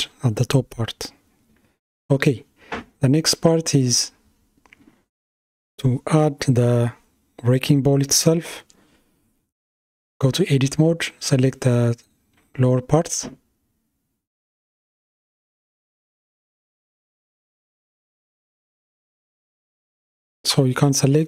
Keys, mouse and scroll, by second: 0.0 space, 1.3 shift+Left, 5.5 click, 9.0 Tab, 11.0 KP_Decimal, 12.0-13.5 scroll down 5, 13.5 KP_1, 18.2-21.2 middle drag.